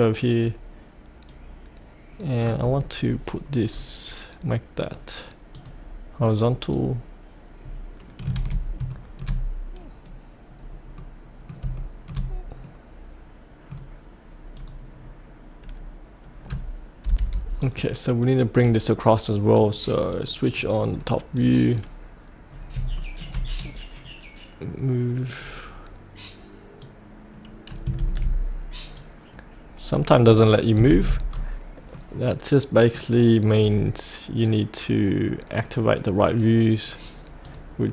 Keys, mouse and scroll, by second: 1.3-2.8 drag, 3.6-4.8 scroll up 1, 4.8 click, 7.6-8.2 scroll down 1, 8.9-9.9 shift+middle drag, 10.1-11.6 scroll up 1, 11.7 shift+middle click, 12.3-12.7 scroll up 1, 12.7-14.0 middle drag, 17.1 F8, 17.6 click, 20.8-21.3 scroll down 1, 21.3 click, 22.5 scroll down 1, 22.9 shift+middle click, 23.9 click, 28.9-30.8 drag, 31.3-31.9 scroll up 1, 31.9-33.3 middle drag, 33.5-36.4 scroll down 1, 36.4-37.4 drag.